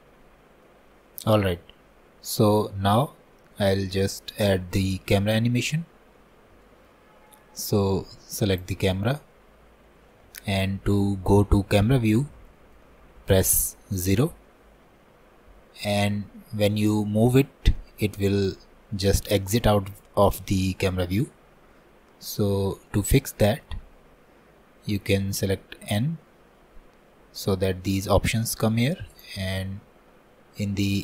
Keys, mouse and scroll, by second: 0.0-7.1 middle drag, 7.1 scroll down 2, 7.3 middle click, 7.8-8.6 scroll up 2, 8.6-11.1 drag, 11.1-14.1 middle drag, 14.1 KP_0, 17.8-19.2 middle drag, 19.2-19.6 scroll down 1, 19.6-22.7 middle drag, 22.9-26.0 middle drag, 26.0 n, 29.2-31.0 drag.